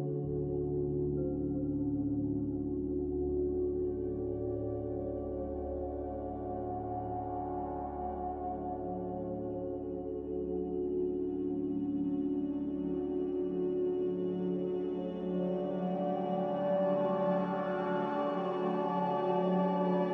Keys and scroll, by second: 0.4-1.1 typing, 4.7-8.4 typing, 8.8 Return, 15.1 ctrl+z, 16.6 Delete, 17.5 z.